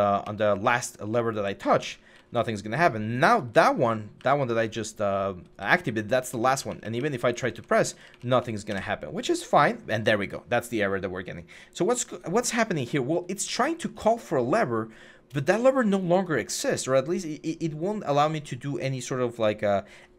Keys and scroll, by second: 0.0-8.0 typing, 8.5 Escape.